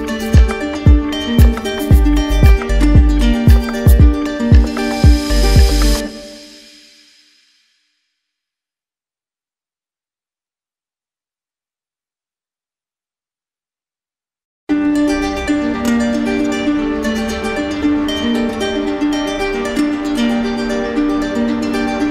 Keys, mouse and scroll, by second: 2.1 click, 6.1 alt+click, 7.7 alt+click, 12.9 alt+click, 14.7 alt+click, 16.9 alt+click, 19.3 click, 21.9 click.